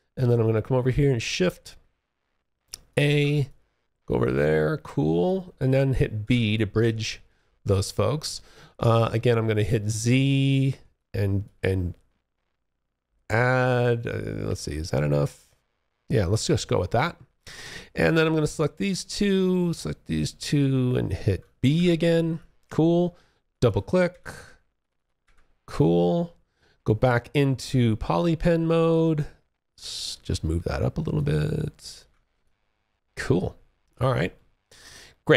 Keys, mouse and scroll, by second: 0.4 shift+click, 1.3 shift+a, 1.8-2.3 shift+a, 2.6 alt+click, 5.4 b, 6.2 alt+click, 9.9 z, 10.1 click, 10.4-13.8 z, 14.0 alt+click, 17.7 click, 18.1 shift+click, 20.9 b, 21.5 alt+click, 22.8 double click, 23.3 f, 23.9 click, 24.1 double click, 24.4 f, 24.9 alt+click, 26.7 q, 28.1 ctrl+shift+click, 30.3 ctrl+shift+click, 31.6 alt+click, 33.5 alt+middle click, 33.8 alt+scroll down 1, 34.0 alt+click.